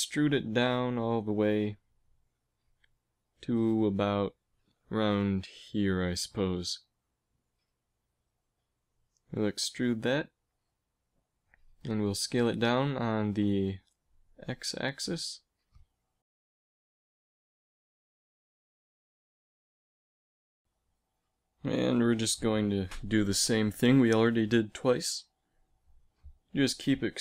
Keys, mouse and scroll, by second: 3.1 g, 9.1 e, 11.9 s, 15.0 s, 17.9 s, 20.1 KP_1, 21.8 e, 24.4 s, 26.0 e.